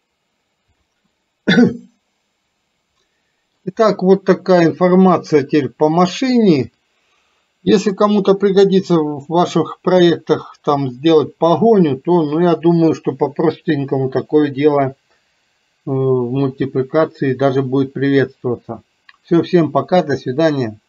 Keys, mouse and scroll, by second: 1.2-3.7 middle drag.